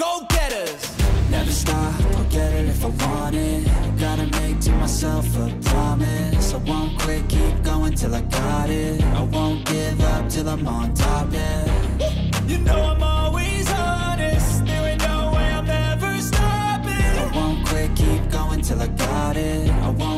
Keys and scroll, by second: 1.0 ctrl+=, 1.6 ctrl+z, 2.0 ctrl+z, 2.7 space, 3.6 ctrl+z, 4.1 ctrl+-, 4.2 ctrl+z, 4.7 ctrl+z, 5.2 ctrl+-, 5.5 space, 5.6 ctrl+-, 5.9 ], 10.1 ctrl+z, 10.6 ctrl+z, 10.9 ctrl+z, 11.7 space, 12.3 ctrl+z, 12.8 ctrl+z, 13.9 ctrl+z, 14.3 ctrl+z, 16.2 ctrl+z, 17.0 ctrl+=, 20.0 ctrl+z.